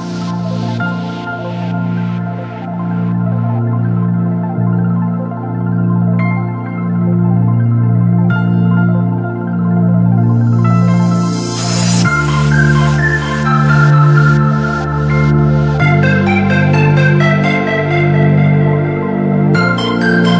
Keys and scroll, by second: 2.2 ctrl+r, 4.0 alt+c, 5.2 F4, 7.5 e, 8.0 shift+F2, 9.2 shift+Page_Up, 11.0 t, 11.4 Escape, 12.8 ctrl+z, 13.9 shift+Page_Up, 14.9 ctrl+z, 15.2 Escape, 16.3 shift+Page_Down, 16.7 Escape.